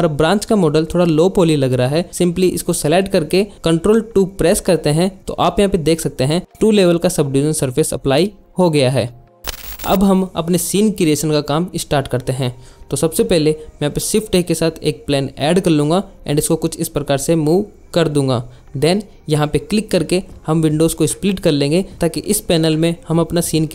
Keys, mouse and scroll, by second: 4.1 ctrl+2, 4.4 click, 15.5 KP_Enter, 18.8 click, 22.5 click, 22.9 click, 23.4 click.